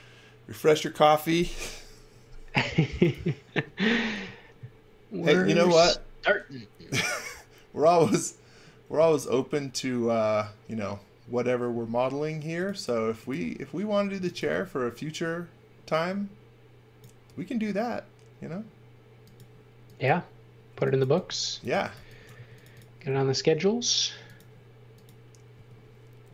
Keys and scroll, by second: 13.9-14.9 typing, 20.5-22.3 typing, 25.5 space.